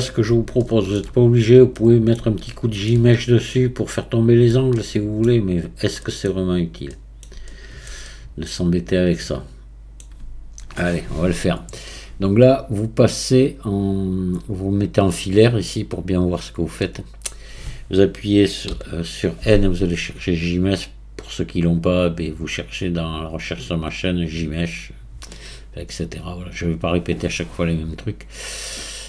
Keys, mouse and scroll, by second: 0.6-1.3 shift+middle drag, 1.3 scroll up 4, 1.8-3.2 middle drag, 3.2-3.5 scroll up 4, 3.5-5.5 middle drag, 5.5-6.0 scroll up 2, 6.0 middle click, 6.3-6.9 scroll down 3, 6.9-11.1 middle drag, 13.7-16.4 drag, 16.4-16.8 scroll up 1, 16.8-18.7 middle drag, 18.7 n, 20.6 click.